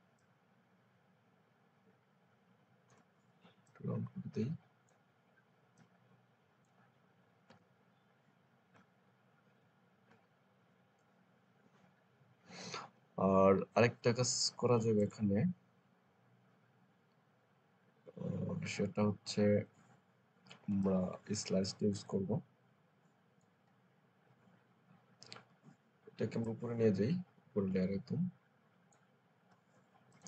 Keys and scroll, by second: 7.4 Return.